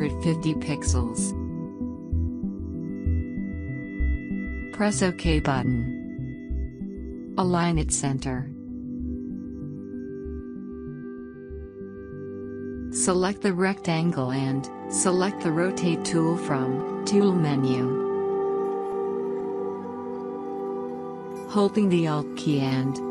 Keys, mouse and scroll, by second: 0.0-0.9 typing, 2.1 Tab, 5.4 click, 17.2 click.